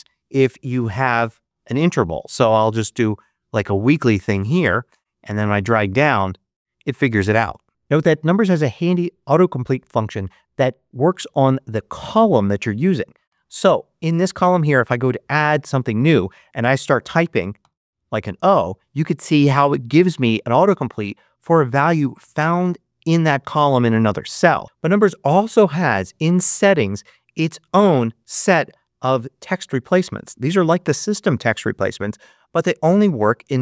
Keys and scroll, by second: 0.0-2.4 typing, 2.8 Return, 13.1 Return, 17.5 shift+o.